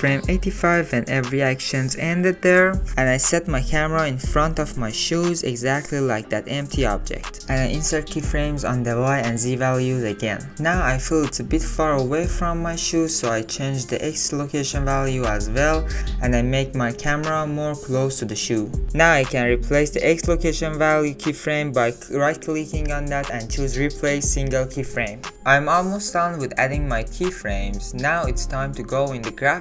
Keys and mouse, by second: 0.6 click, 3.5 shift+click, 3.8 alt+drag, 4.3 alt+click, 4.8 shift+middle drag, 5.2 ctrl+middle click, 6.1 g, 11.3 click, 13.2-14.9 shift+drag, 15.1 ctrl+z, 15.5 click, 16.7 shift+click, 17.6 shift+middle click, 17.8 shift+click, 18.0 shift+click, 18.0 shift+middle click, 18.3 shift+click, 18.5-20.0 shift+middle drag, 20.0 shift+click, 21.2-25.5 drag, 26.1-27.9 drag, 28.0 click, 28.7 click, 28.9 click, 29.1-29.6 drag.